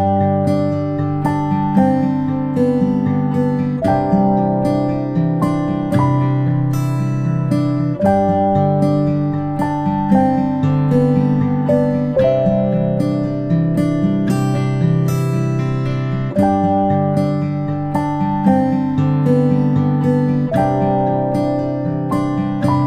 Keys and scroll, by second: 9.0 ctrl+[.